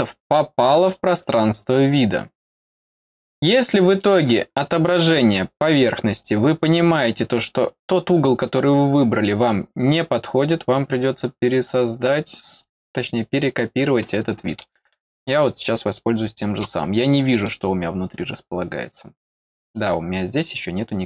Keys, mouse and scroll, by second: 0.9 click, 3.0 scroll up 2, 4.0 middle click, 5.8-6.2 scroll down 2, 14.9-16.5 middle drag, 16.9 middle click, 17.9 scroll down 1, 19.7 click.